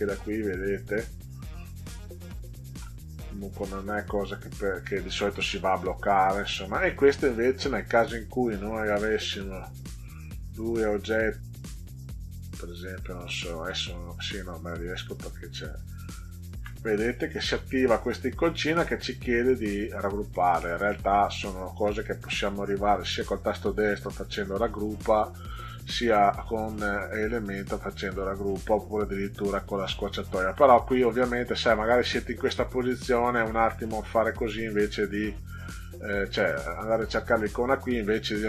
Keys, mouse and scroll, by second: 9.1 click, 10.0 click, 12.4 click, 14.7 click, 15.8 shift+click, 20.6 right click, 25.8 click, 30.3 click, 32.2 click.